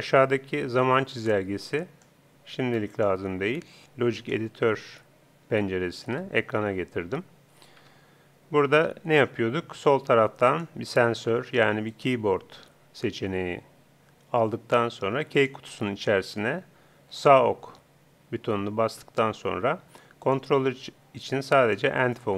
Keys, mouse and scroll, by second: 1.1-2.8 drag, 4.3 click, 6.1 n, 7.8 Home, 10.4-12.4 drag, 15.4-17.1 drag, 20.2-21.9 drag.